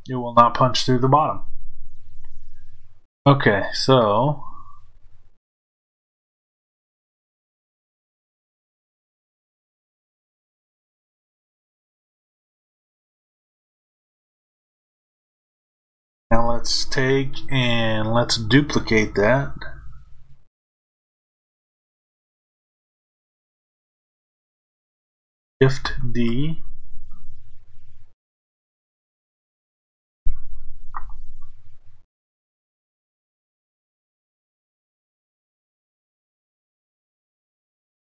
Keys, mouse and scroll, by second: 3.8-38.1 middle drag.